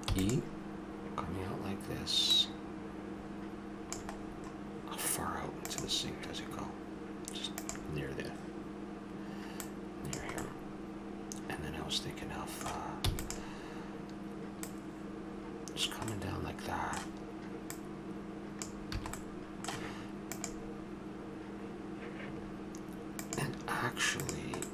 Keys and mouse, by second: 0.0 e, 2.3-4.1 drag, 4.2-5.7 middle drag, 9.5-10.8 drag, 10.8 middle click, 13.0 e, 14.6-16.1 drag, 16.1-17.7 middle drag, 17.7-19.0 drag, 19.0 a, 19.2-20.4 drag, 24.6 click.